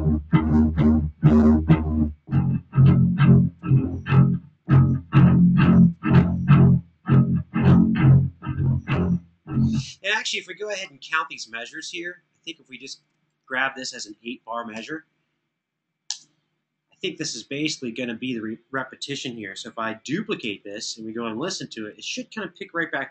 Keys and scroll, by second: 9.5 space, 14.4 8, 15.7 Return, 20.1 super+d, 20.7 super+d.